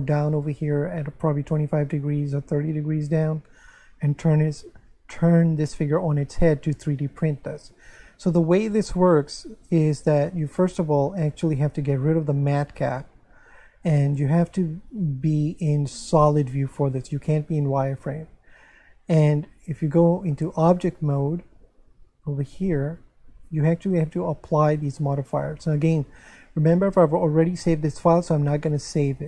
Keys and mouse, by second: 12.1 click, 15.6 click, 19.7 Tab, 23.5 click.